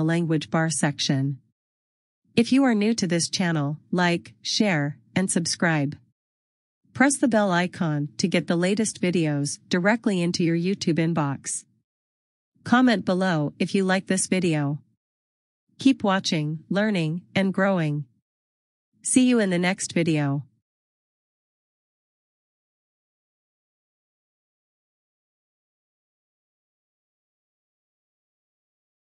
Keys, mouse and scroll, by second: 10.8 click, 14.7 click, 21.5 click.